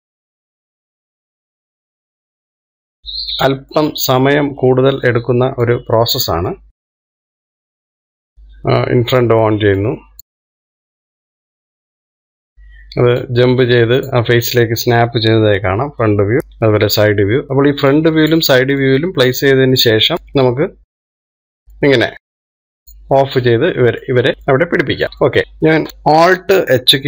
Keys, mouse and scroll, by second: 0.4 middle click, 0.8 click, 1.9 middle click, 2.3 click, 2.7 middle click, 3.0 click, 3.7-6.8 middle drag, 6.8 click, 7.1 middle click, 7.4 click, 9.3 click, 10.2 middle click, 10.5 click, 10.8 middle click, 11.1 click, 11.5 middle click, 11.7 click, 12.4-14.6 middle drag, 14.6 click, 16.4 KP_1, 19.3 click, 22.4-24.1 middle drag, 24.1 click, 25.0 click, 25.2 scroll down 1, 25.4 scroll up 1, 25.8 shift+middle click, 26.3-27.0 scroll down 2.